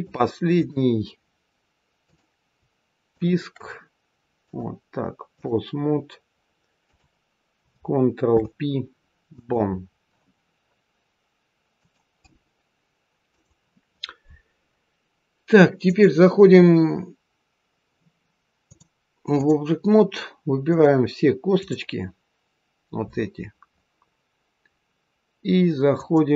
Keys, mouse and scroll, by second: 2.0 click, 3.0 shift+click, 4.4 click, 6.8 click, 8.2 ctrl+p, 15.8 click, 18.6 click, 20.6 click, 21.6 click, 25.8 click.